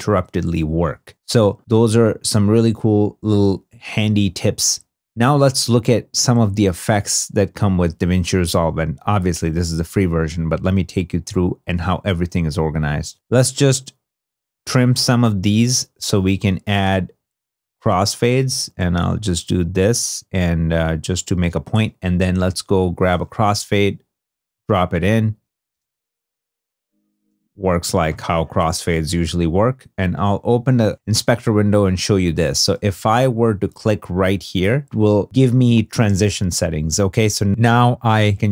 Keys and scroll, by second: 13.1 2, 25.6 space, 27.0 space, 32.9 super+z.